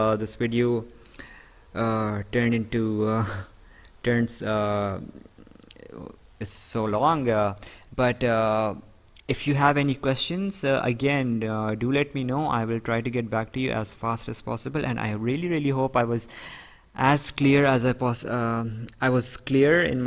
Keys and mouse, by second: 3.1 right click, 9.8 right click.